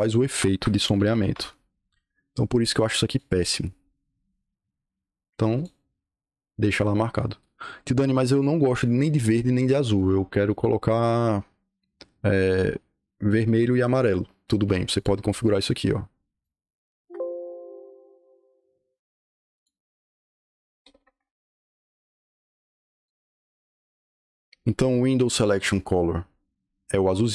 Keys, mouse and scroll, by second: 0.2 Escape, 0.6-1.5 typing, 3.0 click, 3.8 click, 4.2 click, 5.5 click, 10.4 click, 14.9 click, 16.3 click, 16.8 Escape, 17.0 Escape, 19.4 click, 20.7 o, 21.1 Return, 22.8 click.